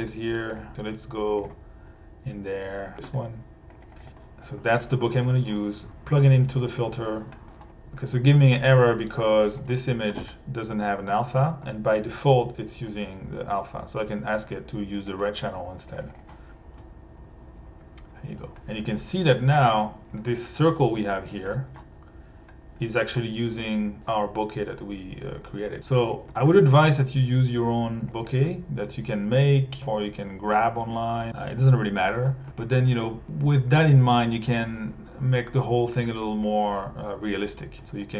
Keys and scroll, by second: 4.0 1, 6.7 1, 9.5 1, 10.7 a, 16.0 1.